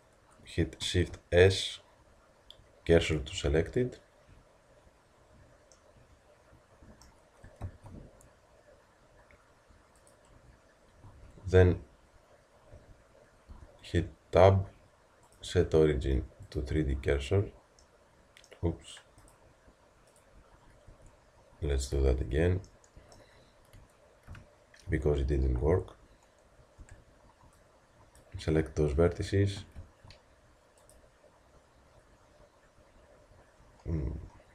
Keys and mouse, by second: 1.1 shift+s, 7.6 shift+s, 11.1 a, 12.8 Tab, 13.6 Tab, 17.9-20.9 middle drag, 20.9 Tab, 22.0 z, 23.6 z, 26.8 b, 31.9 shift+middle click.